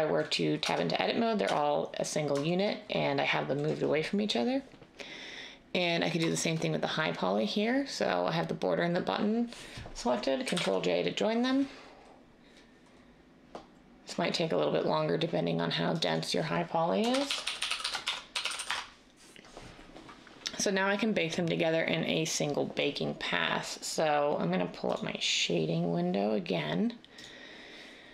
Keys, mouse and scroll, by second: 0.6 Tab, 1.4 Tab, 10.5 ctrl+j, 17.0-18.5 typing, 18.6 Return.